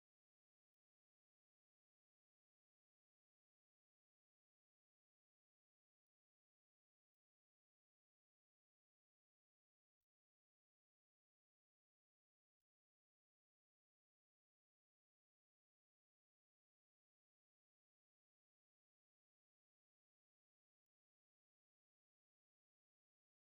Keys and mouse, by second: 0.2 ctrl+middle click, 1.9 shift+click, 3.2 ctrl+middle click, 3.6 middle click, 4.6 shift+middle click, 5.1 middle click, 6.4 space, 11.2 middle click, 12.7 middle click, 14.2 ctrl+middle click, 14.8 ctrl+middle click, 15.3 middle click, 15.6 a, 16.1 middle click, 17.5 shift+middle click, 18.1 middle click, 19.4 ctrl+middle click, 20.1 ctrl+middle click, 20.6 middle click.